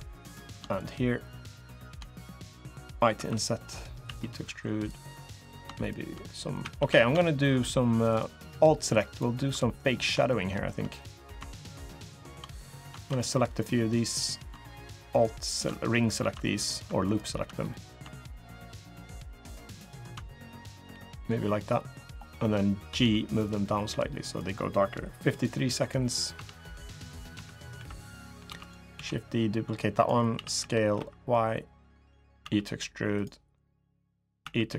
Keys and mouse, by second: 0.0 click, 2.9 i, 3.8 e, 5.6 shift+click, 6.4 a, 6.5 a, 9.6 middle click, 10.1 alt+shift+middle click, 10.7 middle click, 11.2 shift+middle click, 11.7 shift+click, 12.0 shift+middle click, 13.0 middle click, 13.9 middle click, 14.0 right click, 14.9 alt+shift+click, 16.9 alt+shift+click, 17.5 middle click, 18.4 alt+shift+click, 19.0 alt+shift+click, 20.8 middle click, 21.4 middle click, 22.9 g, 25.2 click, 26.1 Tab, 27.1 Tab, 27.5 3, 28.2 shift+d, 28.7 s, 30.1 s, 32.2 e, 34.2 e.